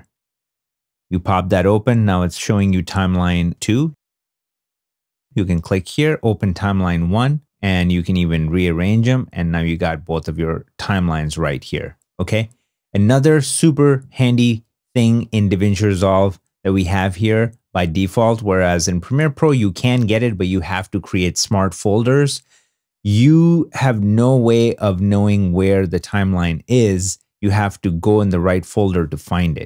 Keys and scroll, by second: 18.2 super+Tab.